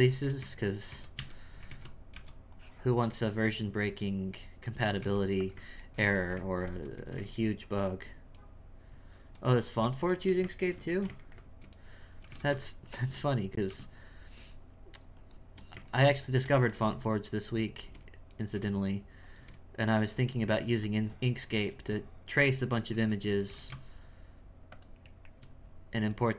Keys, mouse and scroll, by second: 0.4 z, 0.9 z, 1.1 a, 1.7 alt+a, 2.1 b, 5.5 x, 5.9-8.4 ctrl+middle drag, 8.4 right click, 9.2 x, 10.1-11.8 shift+middle drag, 11.8 right click, 12.2 g, 13.5 right click, 13.7 g, 15.9 ctrl+middle click, 16.7 g, 18.3 right click, 20.0 right click, 20.4 c, 25.1-26.1 shift+middle drag, 26.1 right click.